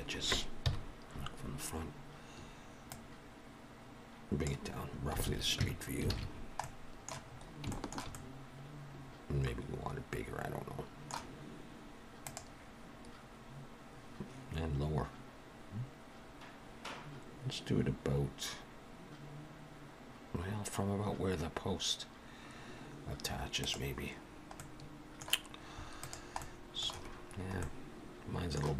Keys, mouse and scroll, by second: 0.6 KP_1, 1.7-2.7 scroll up 2, 2.8 click, 5.2 alt+a, 5.5 Tab, 6.0 alt+a, 6.2-7.2 scroll down 3, 6.5 middle click, 7.2-7.6 scroll up 3, 7.6 shift+middle click, 8.0 middle click, 24.5 middle click, 25.9 click, 26.3 middle click, 28.0 middle click.